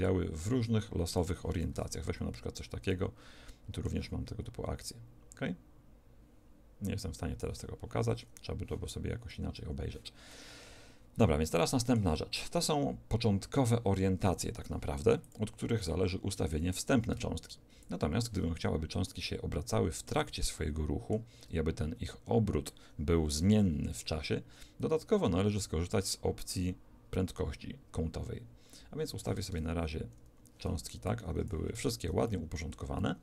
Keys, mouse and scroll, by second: 0.0 click, 1.8 alt+a, 2.9-4.8 middle drag, 4.8 click, 9.3 Escape, 10.3-13.4 middle drag, 15.2-19.0 drag, 19.0-22.4 middle drag, 29.5 alt+a, 30.4 Escape, 31.0 click, 31.8 alt+a, 32.3-33.2 middle drag.